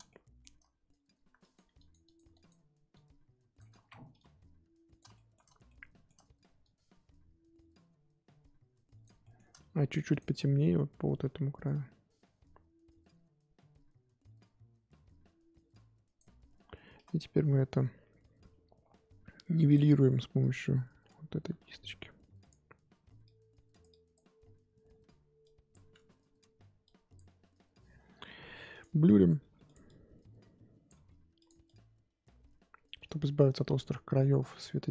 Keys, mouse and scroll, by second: 0.1-1.4 shift+middle drag, 1.4-3.7 drag, 3.7 ctrl+z, 4.1-5.1 drag, 5.1-6.6 shift+middle drag, 6.6-9.2 drag, 9.2 shift+middle click, 10.1 click, 10.3-10.7 scroll down 1, 10.7-11.6 scroll up 1, 11.6-14.6 drag, 19.7 click, 20.4-29.4 drag, 29.4 f, 29.8-30.9 drag, 30.9 f, 31.6-34.9 drag.